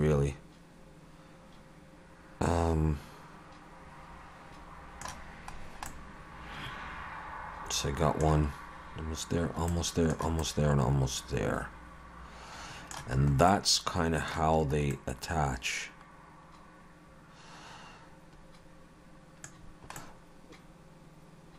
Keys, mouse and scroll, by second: 5.6-7.6 scroll down 3, 5.9 middle click, 9.7 middle click, 10.4 middle click, 13.2-14.6 scroll up 3, 13.5 middle click, 14.6-15.5 scroll up 2, 14.9 middle click, 19.6-20.0 scroll down 2, 20.0 middle click.